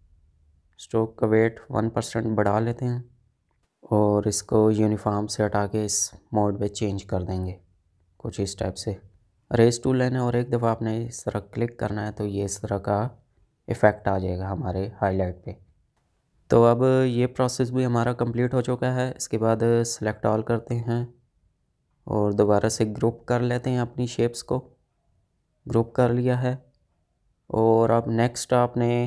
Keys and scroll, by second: 11.2 ctrl+z, 15.1 space, 25.1 ctrl+g.